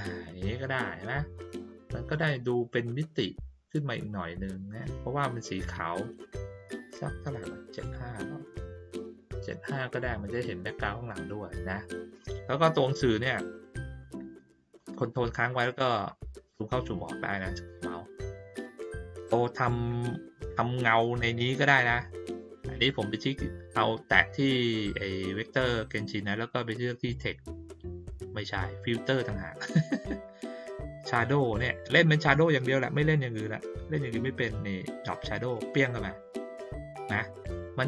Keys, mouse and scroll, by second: 6.7 right click, 7.8 click, 13.0-13.8 ctrl+scroll up 1, 13.8-14.3 ctrl+scroll up 1, 15.2 ctrl+scroll down 1, 15.5-15.9 ctrl+scroll up 2, 15.9 ctrl+scroll down 1, 16.0 ctrl+scroll up 1, 16.1-17.0 ctrl+scroll down 1, 17.0 ctrl+scroll up 1, 17.2 ctrl+middle click, 19.4 click, 27.1 click, 28.8 click, 35.5 click, 37.1-37.8 drag.